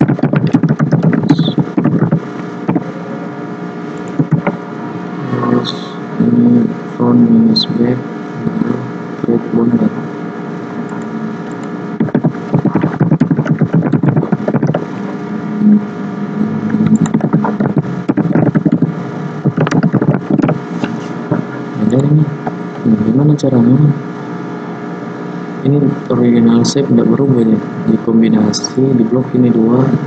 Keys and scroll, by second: 12.0 ctrl+a, 17.2 ctrl+a.